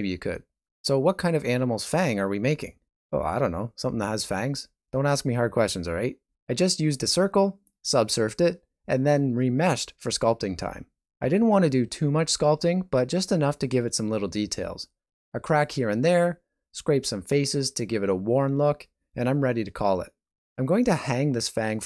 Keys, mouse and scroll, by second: 0.4 alt+z, 0.6 click, 1.1 shift+middle click, 1.5 ctrl+middle click, 2.6 r, 3.2 g, 4.6 click, 5.2 g, 6.5 click, 6.8 r, 7.5 ctrl+r, 8.6 ctrl+b, 9.6 alt+a, 10.1 Tab, 10.5 ctrl+middle click, 11.0 middle click, 19.9 right click, 19.9 g, 20.2 g, 21.1 alt+a, 21.2 middle click, 21.5 Tab, 21.6 middle click.